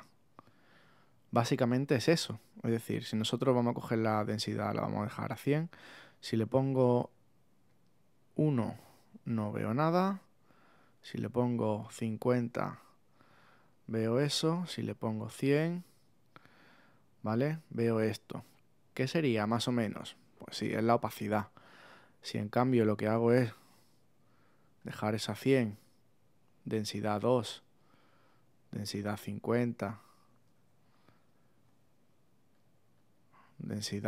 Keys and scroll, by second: 31.5 super+z.